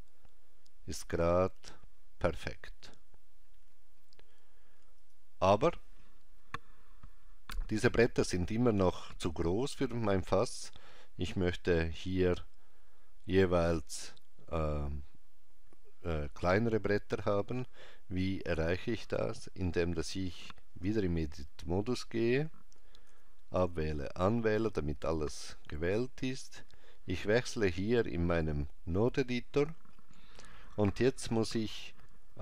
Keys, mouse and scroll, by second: 4.9 click, 18.4 click, 20.9 Tab, 23.1 a, 27.8 click.